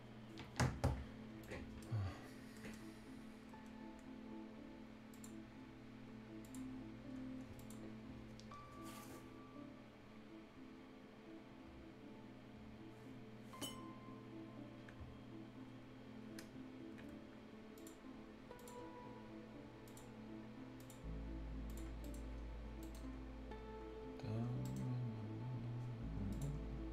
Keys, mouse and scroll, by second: 0.7-1.0 scroll down 1, 1.0-1.4 scroll up 1, 1.4 right click, 1.9 scroll down 1, 4.7-5.0 scroll up 1, 5.3 scroll down 1, 5.5 scroll up 1, 6.4 click, 6.6 scroll down 1, 6.8 scroll up 1, 7.5 click, 14.9 scroll down 1, 15.2 scroll up 1, 17.3-17.7 scroll up 1, 17.7 click, 19.0 scroll up 1, 19.8 click, 21.8 scroll down 1, 22.0 right click, 22.8 right click, 23.0-23.7 scroll up 1, 24.4 scroll down 1, 24.6 right click, 24.9-25.4 scroll up 1, 26.3 click, 26.5 scroll down 1.